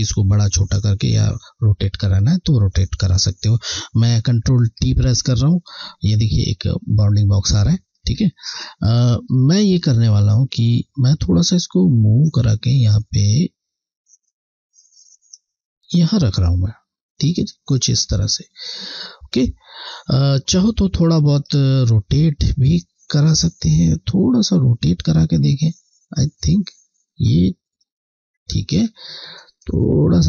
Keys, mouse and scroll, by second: 1.9 scroll, 2.1 alt+scroll down 2, 7.6 ctrl+t, 7.9 scroll, 9.1-9.5 scroll, 11.3 click, 18.8 click, 18.9 alt+scroll down 1, 21.6 alt+scroll down 1, 22.9 click, 28.7 scroll, 29.7 click.